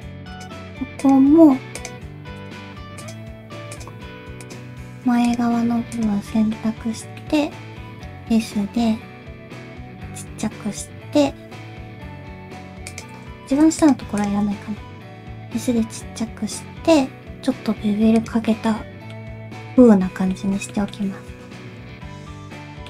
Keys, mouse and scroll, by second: 0.3 shift+click, 6.3 middle click, 7.2 middle click, 7.9 s, 13.3 ctrl+z, 13.8 shift+click, 14.2 shift+click, 15.2 s, 18.5 middle click, 19.2-19.6 scroll down 2, 19.6 middle click, 20.7 shift+middle click, 21.0 middle click.